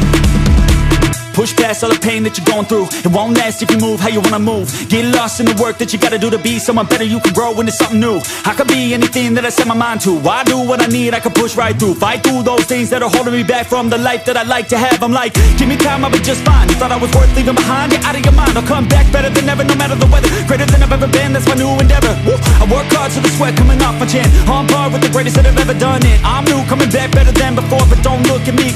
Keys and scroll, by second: 0.0-2.1 typing, 3.5 Return, 12.3 n, 12.9 Return, 14.3-20.1 typing, 21.4 BackSpace, 21.9 ,, 25.9-28.7 typing.